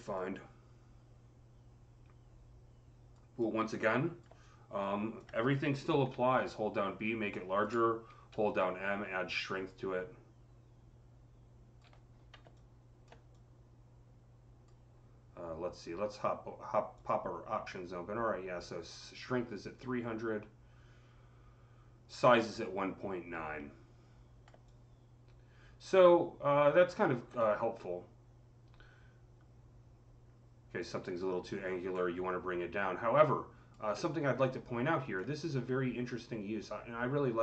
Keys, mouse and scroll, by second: 5.9-7.1 typing, 6.7-8.5 drag, 8.7-10.0 typing, 12.4-19.3 alt+drag, 13.2-14.0 typing, 19.6-37.4 drag, 33.8 alt+middle click.